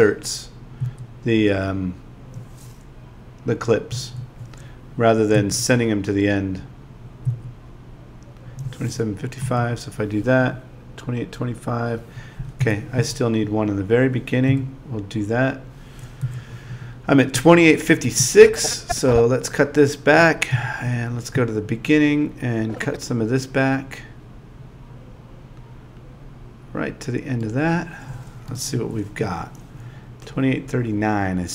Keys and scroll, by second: 0.8 Down, 3.9 w, 5.3 Down, 9.4 w, 12.6 Home, 14.5 w, 16.2 End, 20.5 Home, 28.8 Down.